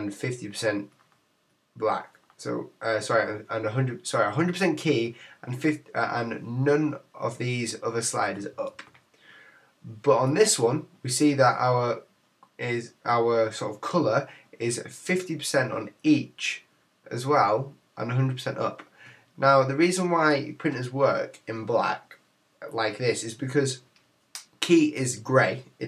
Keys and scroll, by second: 8.7 super+z.